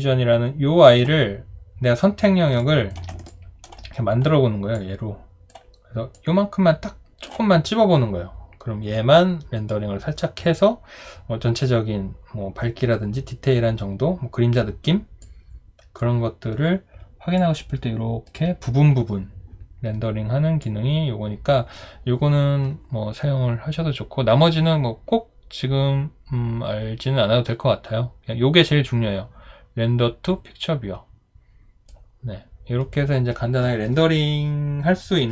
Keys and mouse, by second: 2.6 ctrl+click, 3.3 alt+click.